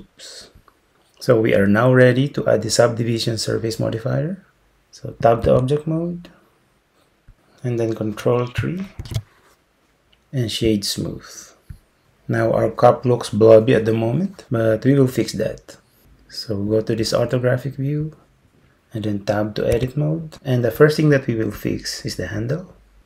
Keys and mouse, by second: 5.5 Tab, 9.1 ctrl+3, 11.2 click, 19.8 Tab.